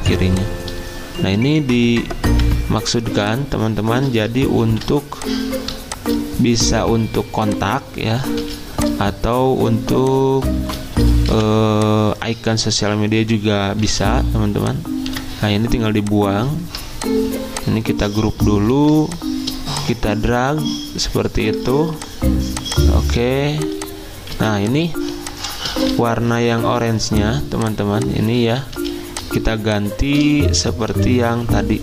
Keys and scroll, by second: 2.3 v, 4.6 ctrl+g, 8.4 z, 9.7 Delete, 18.7 ctrl+g, 24.3 z, 26.2 y, 28.8 z, 30.7-31.4 typing.